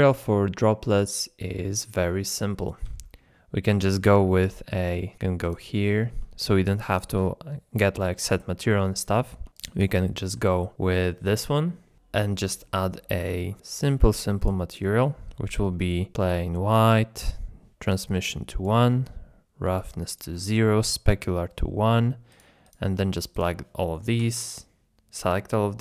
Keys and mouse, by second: 2.7 middle click, 4.3 middle click, 5.4 click, 5.9 shift+middle drag, 8.7-9.0 middle drag, 9.6 shift+click, 10.0-10.4 shift+drag, 10.5-11.1 middle drag, 13.6 click, 14.7 click, 15.6 middle click, 15.7 middle click, 16.5 click, 18.3 click, 19.8 click, 20.8 click, 22.3 click.